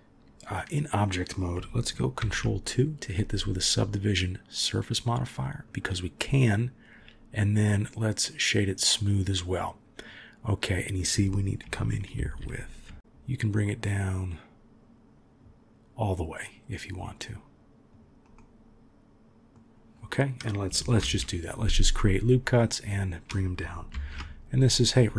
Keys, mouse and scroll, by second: 2.2 ctrl+2, 5.5 click, 7.4 right click, 12.1 ctrl+r, 18.3-19.5 middle drag, 21.0 ctrl+r, 23.9 ctrl+r.